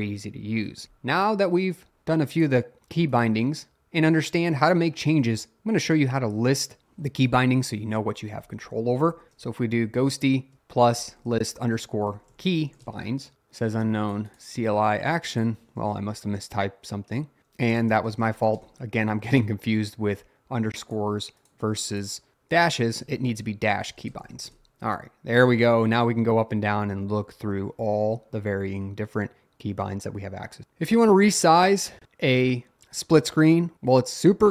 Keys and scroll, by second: 7.7-13.4 typing, 17.4 Up, 17.4 Down, 17.8 BackSpace, 22.8-24.7 typing.